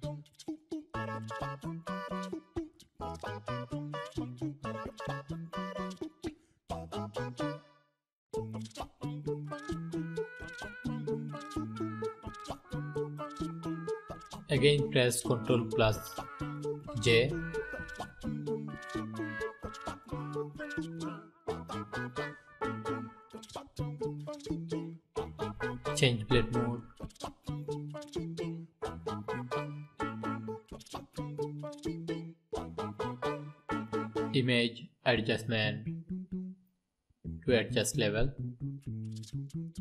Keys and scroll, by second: 14.3 ctrl+j.